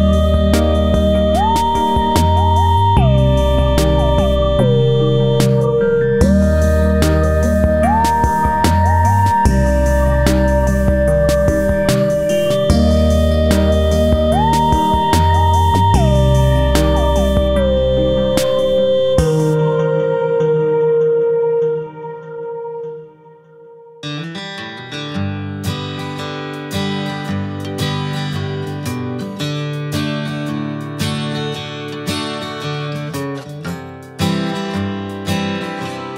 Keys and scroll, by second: 10.7 ctrl+c, 10.8 ctrl+v, 13.2 space, 14.8 ctrl+a, 19.1 Left, 25.4 space, 32.9 ctrl+c, 33.1 ctrl+v.